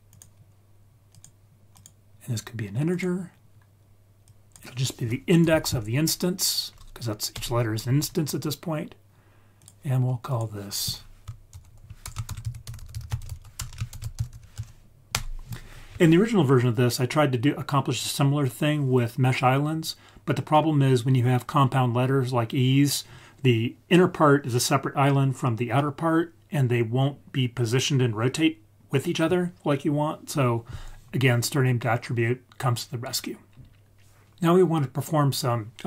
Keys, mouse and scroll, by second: 1.7-2.9 drag, 4.2 click, 9.5 click, 10.2 click, 12.7 t, 13.6 BackSpace, 31.5-32.2 scroll down 4.